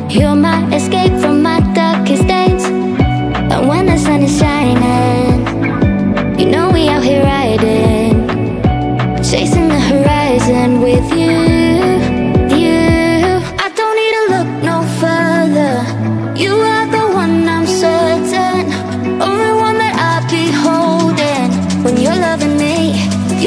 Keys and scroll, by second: 14.5 Down, 22.9 ctrl+v.